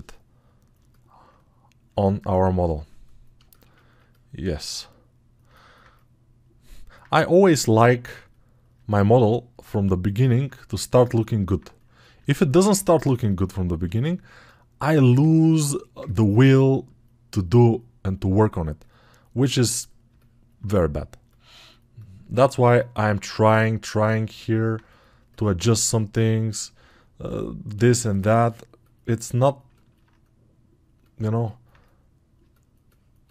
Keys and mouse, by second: 20.4-27.9 drag, 20.4-27.9 middle drag, 20.4-27.9 right drag.